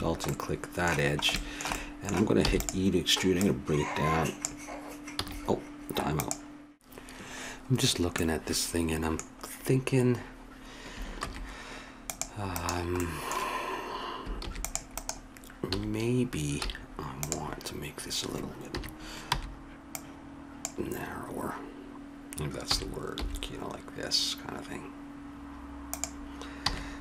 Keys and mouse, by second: 2.4 e, 5.1 a, 8.1 middle click, 11.2 ctrl+r, 14.4 ctrl+r, 15.7 a, 16.6 z, 18.7 KP_3, 19.3 b, 22.7 s, 26.8 a.